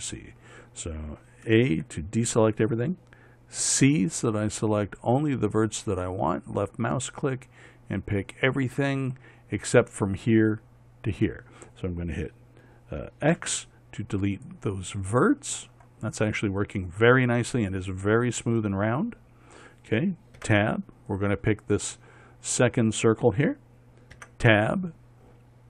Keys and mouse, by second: 2.3 a, 4.1 c, 13.8 x, 20.9 Tab, 21.6-24.1 drag, 24.7 Tab.